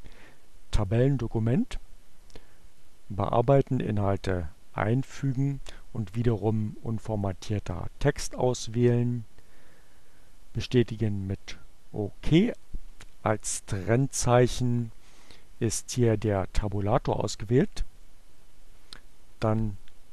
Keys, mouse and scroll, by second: 2.1 click, 3.5 click, 6.4 click, 8.6-10.4 drag, 18.8 click.